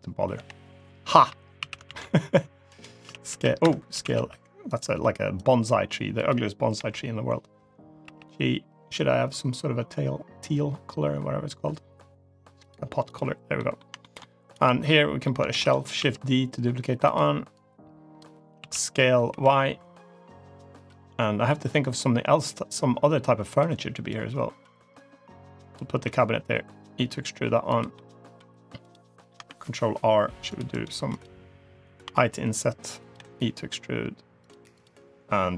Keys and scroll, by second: 0.2 l, 1.4 s, 2.9 z, 3.4 Escape, 3.8 s, 6.6 l, 7.9 g, 15.4 shift+d, 15.8 s, 18.4 s, 25.9 e, 29.3 ctrl+r, 30.8 3, 31.9 i, 33.0 e.